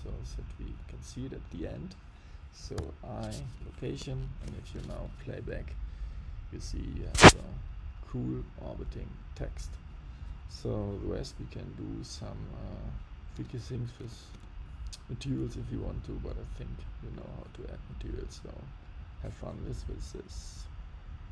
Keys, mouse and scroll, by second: 2.7 i, 4.1 shift+Left, 4.7 space, 13.3 space, 14.0 space, 14.3 space.